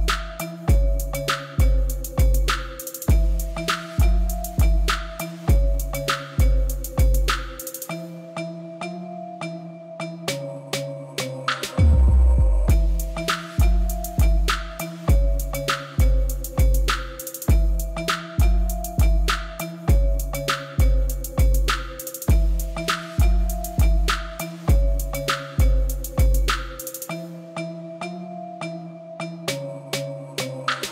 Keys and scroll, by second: 2.0 r, 2.2 y, 2.4 g, 4.0 g, 8.1 g, 10.7-13.5 typing, 11.2 Escape, 15.2 ctrl+z, 15.7 ctrl+z, 16.3 shift+z, 17.0 shift+z, 18.4 shift+z, 19.5 b, 19.9 shift+z, 21.8 ctrl+z, 22.5 shift+z, 23.9 shift+z, 24.8 shift+z, 27.1 ctrl+z, 29.5 shift+z, 29.9 shift+z.